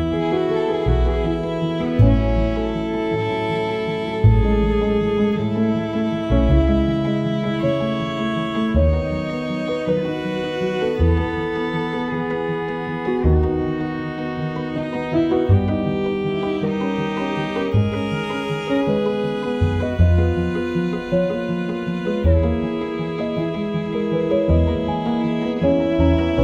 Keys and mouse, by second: 0.0 click, 0.1 s, 1.1 click, 1.1 s, 2.0 alt+middle click, 2.5 KP_1, 3.3 alt+middle click, 3.5 click, 3.8 ctrl+KP_3, 4.0 ctrl+KP_1, 4.3 g, 5.6 middle click, 6.0 KP_3, 6.2 KP_1, 6.6 g, 8.3 click, 8.8 click, 9.1 g, 10.0 shift+middle click, 10.2-11.5 alt+middle drag, 11.5 Tab, 11.6 click, 11.7 alt+middle click, 12.5 click, 12.7 shift+click, 12.9 KP_4, 12.9 KP_1, 13.1 g, 13.9 click, 14.1 shift+middle click, 14.4-15.7 alt+middle drag, 15.8 shift+middle click, 16.0 click, 16.4 click, 16.5 KP_1, 16.5 KP_4, 16.8 KP_3, 17.0 click, 17.3 shift+a, 18.7 ctrl+z, 18.8 shift+a, 20.5 click, 21.4 click, 22.0-23.1 drag, 23.3 r, 24.7 s, 25.0 g, 25.4 s, 25.7 g.